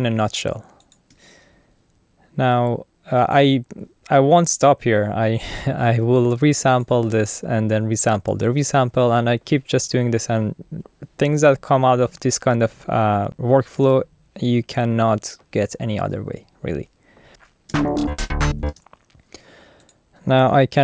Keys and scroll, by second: 17.3 Return, 17.7 space.